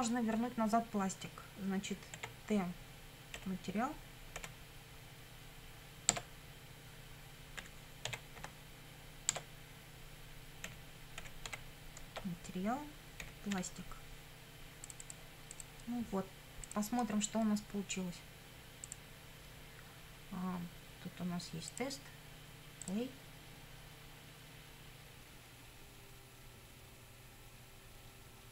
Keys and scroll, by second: 2.2 t, 3.4 ., 4.4 m, 6.1 Tab, 7.4-8.9 typing, 9.3 Tab, 10.7 ., 11.2 m, 11.5 a, 12.0 Tab, 13.2 ., 14.6 p.